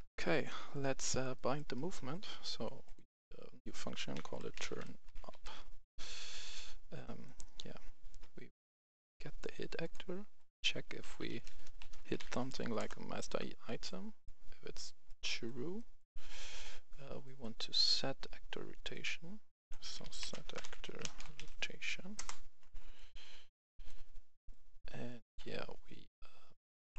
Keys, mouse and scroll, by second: 0.3 right click, 0.9-1.2 scroll down 1, 1.2 right click, 2.7 click, 4.0-4.9 typing, 5.4 Return, 6.9-8.0 right drag, 9.0 click, 10.6 click, 10.6-12.1 typing, 12.7 Return, 15.0 click, 15.6 right click, 17.5-18.8 scroll down 1, 18.8 click, 19.7-21.3 typing, 20.8 click, 22.1 Return, 22.8-24.0 drag, 24.9-26.0 right drag.